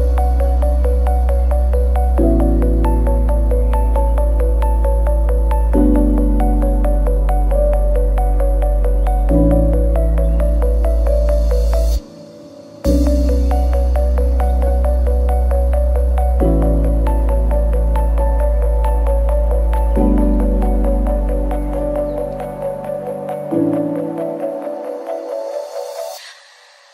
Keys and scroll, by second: 0.8 ctrl+z, 3.0 ctrl+c, 8.8 ctrl+x, 9.3 ctrl+v, 9.9 Tab, 12.0 ctrl+c, 14.3 ctrl+a, 20.0 Tab, 25.8 Tab.